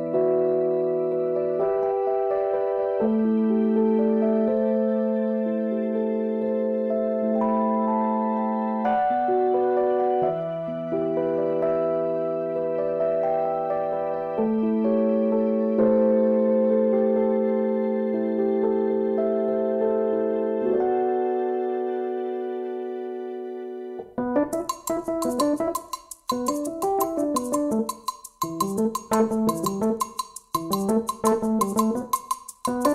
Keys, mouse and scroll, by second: 1.1-1.8 ctrl+scroll up 4, 4.0 click, 6.0 click, 6.8 click, 9.3 click, 11.3 ctrl+z, 12.5 ctrl+z, 14.6-15.5 ctrl+scroll down 6, 16.9 click, 18.8 click, 19.4 middle click, 22.2 click, 23.4-24.7 drag, 25.2-25.9 ctrl+scroll up 4, 26.6-29.5 ctrl+shift+drag, 31.8 click.